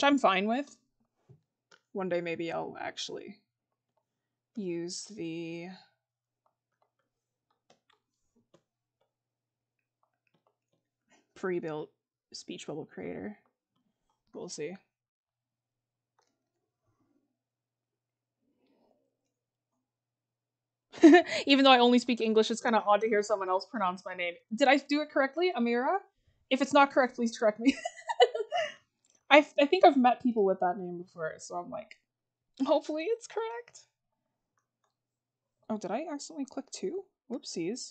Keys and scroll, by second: 14.1 scroll, 29.2 scroll.